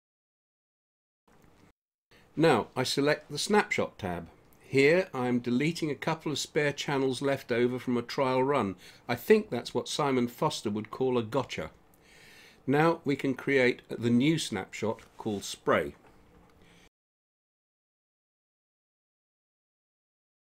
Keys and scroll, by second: 16.3-18.2 typing, 18.5 Return.